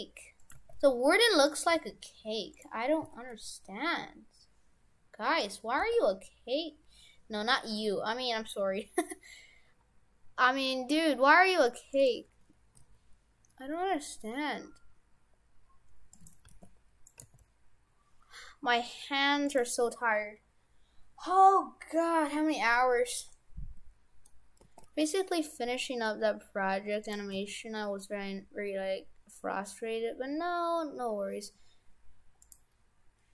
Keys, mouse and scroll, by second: 0.6 g, 1.7 g, 3.0 s, 5.8 g, 12.8 s, 16.5 g, 17.2 g, 22.7-23.2 scroll up 5, 23.4 middle click, 24.6 g, 27.4 g.